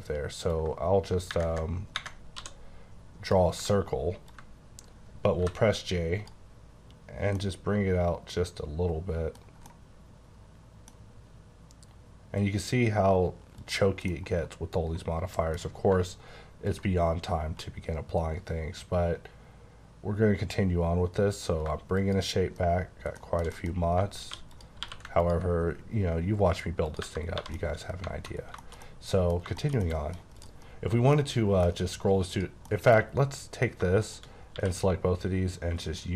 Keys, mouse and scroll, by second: 0.5 ctrl+click, 2.4 d, 4.3 ctrl+click, 5.4 j, 7.3 middle click, 9.7 middle click, 13.6 click, 14.1 scroll down 1, 15.6 scroll up 3, 16.7 ctrl+click, 21.6 shift+click, 23.4 shift+middle click, 23.5 shift+middle click, 23.8 Tab, 24.3 3, 24.5 click, 24.8 q, 25.2 ctrl+click, 27.0 Tab, 27.3 1, 27.5 middle click, 28.3 scroll down 3, 28.6 middle click, 29.5 middle click, 30.3 click, 31.1 middle click, 32.3 click, 32.6 middle click, 33.0-33.8 scroll up 4, 34.0 shift+click, 34.5 q, 35.8 click.